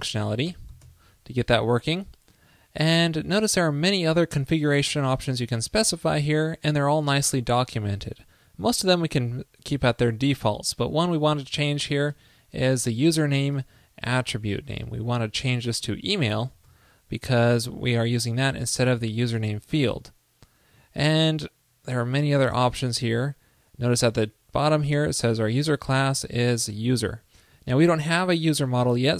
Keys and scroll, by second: 13.7 super+/.